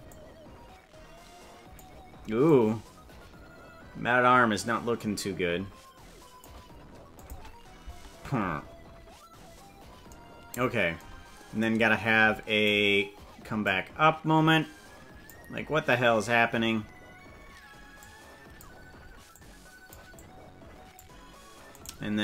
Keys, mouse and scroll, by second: 0.0-1.8 drag, 2.4-6.4 drag, 7.1 click, 7.9 space, 8.5 space, 11.6-12.6 drag, 13.6-15.3 drag, 18.0 click, 19.3 click, 20.1 click, 21.9 right click.